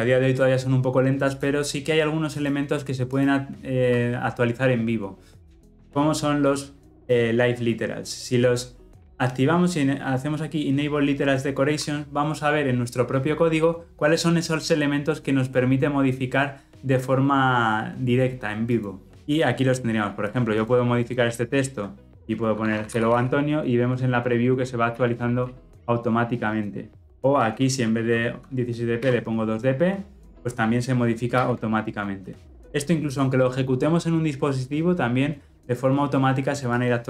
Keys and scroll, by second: 24.8 ctrl+z, 31.2 ctrl+z.